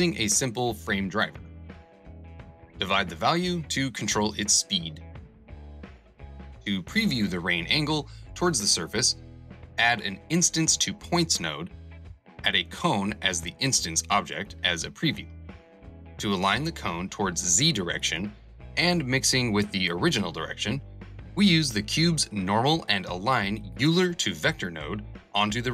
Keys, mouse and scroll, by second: 5.5 shift+a, 5.8 shift+s, 6.0 shift+e.